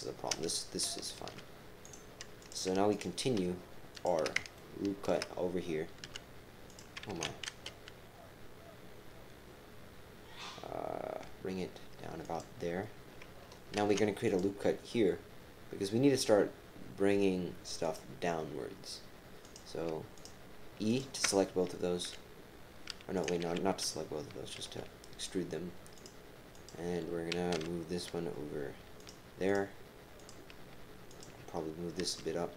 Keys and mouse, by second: 1.1 ctrl+r, 2.4 click, 2.5 typing, 2.9 shift+click, 3.9 shift+click, 6.0-7.7 typing, 13.7 ctrl+r, 19.4 click, 20.0-24.6 typing, 20.1 shift+click, 20.9 shift+click, 26.2-27.5 typing, 26.5 click, 28.7-30.0 typing, 29.4 click, 30.2 click, 31.1 click, 32.0 g.